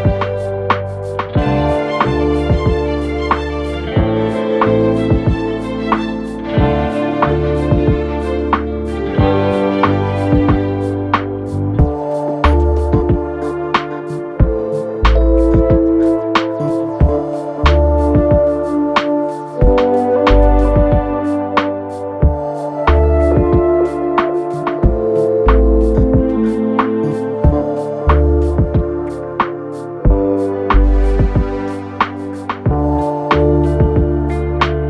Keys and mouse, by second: 0.6 Tab, 1.1 click, 1.6-11.9 shift+middle drag, 11.9 click, 12.0-14.5 middle drag, 12.4 Tab, 14.0 shift+d, 14.5-17.5 drag, 17.0 s, 17.5 middle click, 18.1-27.7 drag, 18.8 s, 26.7 s, 27.7-30.9 middle drag, 30.9-32.6 drag, 31.8 s, 32.6 middle click, 33.1-34.8 drag.